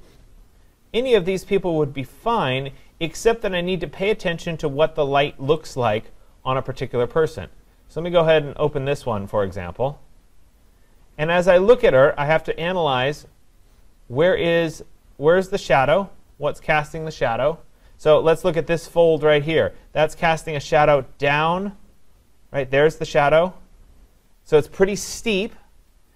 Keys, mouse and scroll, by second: 0.5-1.3 scroll down 2, 1.3-2.3 scroll down 4, 2.3-3.5 scroll down 6, 3.5-5.7 scroll up 10, 5.7 click, 10.2-11.6 scroll up 6, 11.8-12.2 scroll down 8, 13.0-13.7 scroll down 1, 13.7-14.8 scroll down 15, 15.8-17.0 scroll down 2, 17.0 scroll.